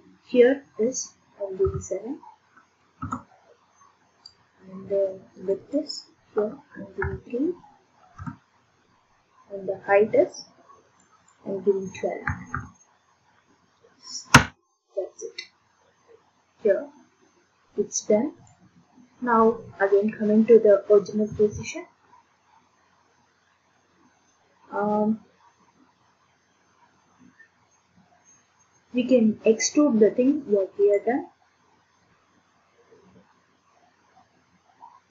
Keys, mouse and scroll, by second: 3.0 Return, 5.5 click, 5.7 click, 7.0 3, 8.2 Return, 11.0 click, 11.0 typing, 11.3 click, 12.3 typing, 14.3 Return, 18.5 click, 21.3 ctrl+d, 27.8 middle click, 31.0 click.